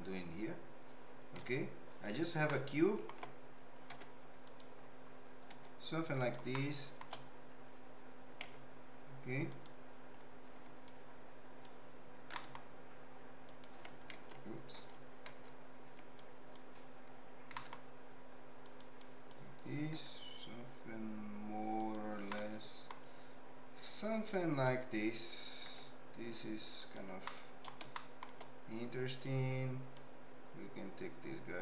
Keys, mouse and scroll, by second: 1.3 KP_5, 2.5 ctrl+middle click, 3.9 s, 5.5 s, 6.5 shift+middle click, 8.4 s, 10.5 1, 10.8 click, 12.3 g, 14.1 alt+z, 14.7 alt+z, 15.3 alt+z, 16.1 click, 17.5 g, 19.0 click, 19.9 s, 22.3 middle click, 24.3 click, 25.6 s, 27.2 middle click, 27.9 shift+middle click, 29.4 click.